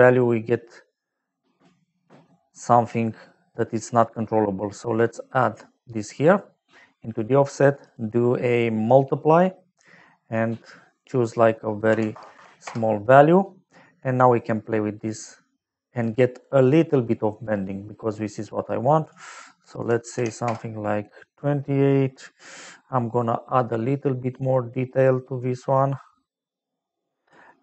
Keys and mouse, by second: 4.9 click, 7.8 click, 9.7 click, 10.9 click, 11.9 KP_Decimal, 12.1 KP_0, 12.3 KP_1, 12.6 Return, 14.3 click, 17.9 middle click, 19.0 click, 19.8 KP_2, 20.1 KP_8, 20.4 Return, 23.1 click.